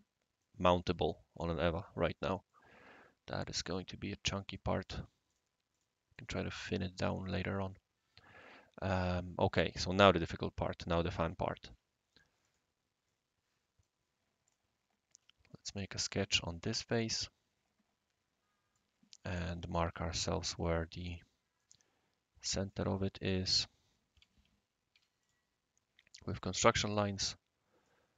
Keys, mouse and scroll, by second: 0.4-0.9 right drag, 2.5-3.5 right drag, 4.3 right drag, 4.8 click, 5.3 click, 5.7 click, 6.2-6.8 right drag, 7.2 middle drag, 7.7-9.9 right drag, 12.4 click, 13.0-13.8 right drag, 14.4 click, 15.5-16.2 middle drag, 16.8-18.8 right drag, 19.2-19.8 typing, 20.5 click, 21.6-22.7 right drag, 23.5 click, 24.1-24.9 typing, 25.2 click, 26.3 click, 27.0 right click.